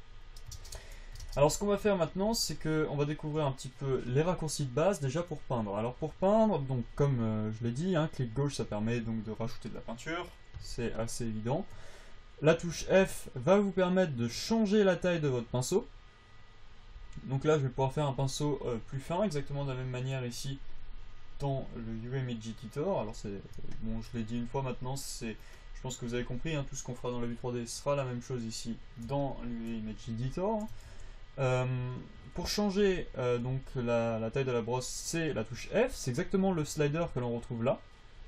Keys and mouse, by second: 0.0 shift+space, 0.8 shift+space, 1.6 shift+space, 13.0 f, 18.8-28.8 drag, 20.4 f, 22.2 f, 31.2 f, 32.5 f, 33.8 f, 35.7 f.